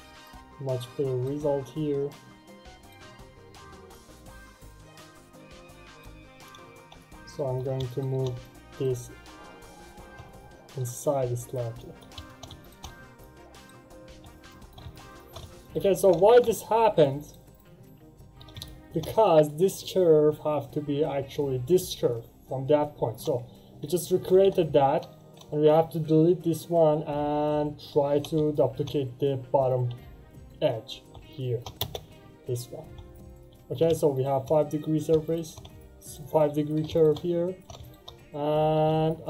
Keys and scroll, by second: 24.1 Delete, 24.2 Return, 31.7 space.